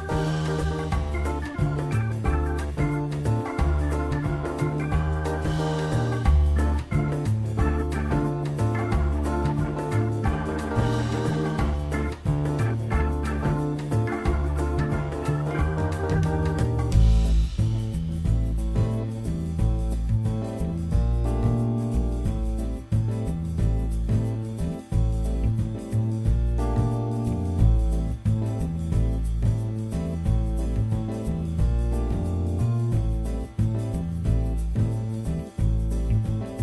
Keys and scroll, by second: 3.1 3, 7.4 t, 8.5 z, 17.9 ctrl+z, 18.7 ctrl+y, 19.2 F4, 20.9 F4, 28.2 ctrl+a, 29.2 ctrl+a, 31.0 e, 31.7 Return.